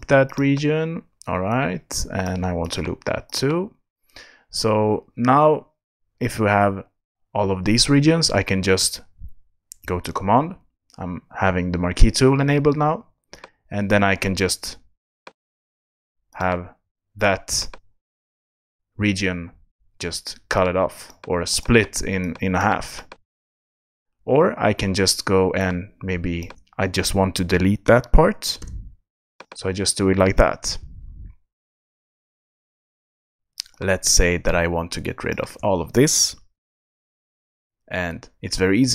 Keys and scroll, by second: 28.6 BackSpace, 36.6 super+BackSpace.